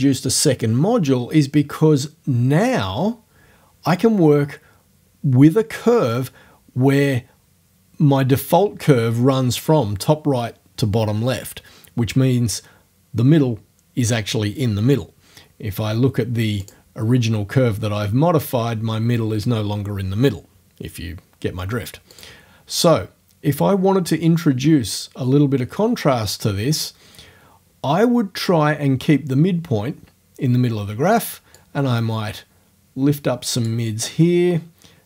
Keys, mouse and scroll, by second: 16.7 click, 22.1 click, 31.6-33.8 drag, 33.8-35.0 scroll up 1.